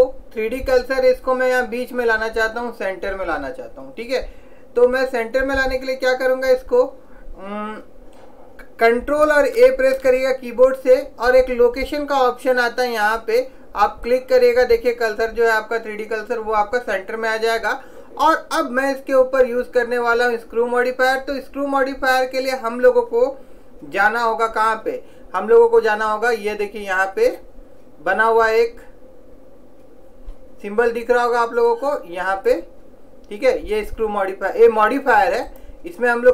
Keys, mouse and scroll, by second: 10.0 ctrl+a, 22.0-23.7 drag, 31.8-33.6 drag, 35.6 click.